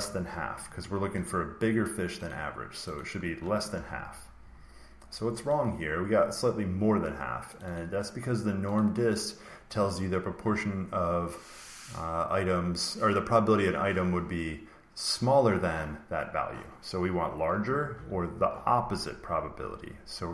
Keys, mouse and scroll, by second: 1.2 click, 2.2 click, 2.9 click, 3.7 ctrl+v, 5.4 click, 7.5 click, 7.7 click, 8.7 click, 17.5-17.8 typing.